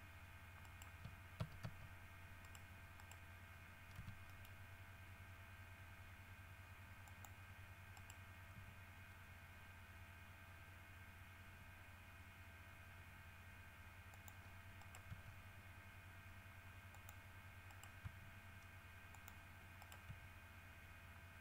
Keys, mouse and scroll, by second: 0.8 shift+right click, 1.6 shift+w, 1.8 shift+s, 2.6 right click, 3.2 right click, 4.1 g, 4.5 middle click, 7.3 click, 8.1 right click, 8.7 g, 14.3 click, 15.0 right click, 15.3 g, 17.1 click, 17.9 right click, 18.2 g, 19.3 click, 20.0 right click, 20.3 g.